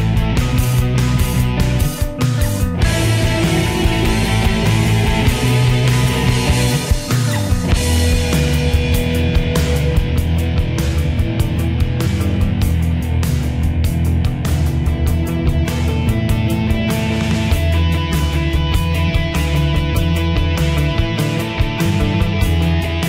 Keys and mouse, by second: 1.1 click, 10.5 click, 16.7 click.